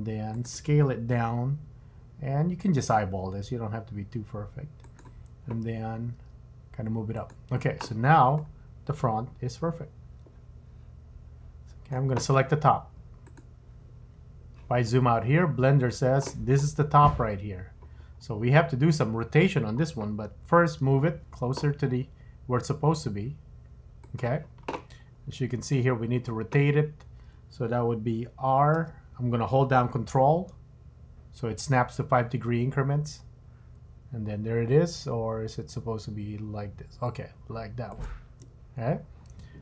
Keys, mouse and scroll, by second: 1.1 s, 6.1 g, 8.4 middle click, 13.3 click, 15.1-15.4 scroll up 4, 15.4-15.9 scroll down 9, 18.1 scroll up 3, 18.5 scroll down 2, 20.8 g, 25.0-25.8 scroll up 3, 25.8-26.7 scroll down 1, 28.8 r, 38.8-39.6 scroll up 5.